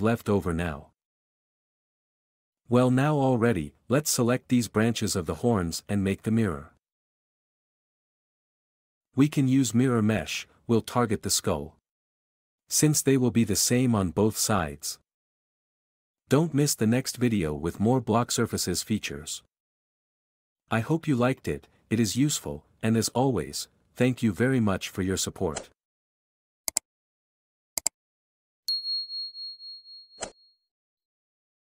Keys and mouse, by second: 0.8-4.6 typing, 5.6 click, 9.3 q, 11.9 q, 20.4 click, 22.6 g, 23.5 Escape.